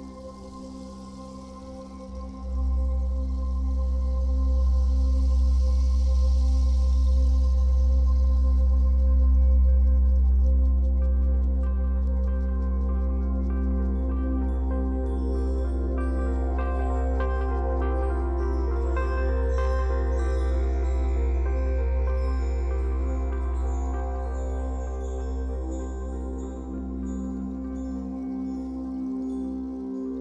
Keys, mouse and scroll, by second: 0.2-3.7 drag, 3.7-5.1 middle drag, 5.1-7.5 drag, 7.5-9.5 middle drag, 9.5-13.5 drag, 13.5-14.6 middle drag, 14.6-18.6 drag, 18.4 scroll down 2, 18.6-30.2 middle drag, 19.2-19.5 scroll down 2, 19.7-20.1 scroll down 2, 20.5 scroll down 2, 21.2-21.6 scroll up 2, 25.7-26.7 scroll up 4, 27.7-29.0 scroll up 4, 29.9-30.2 scroll down 2.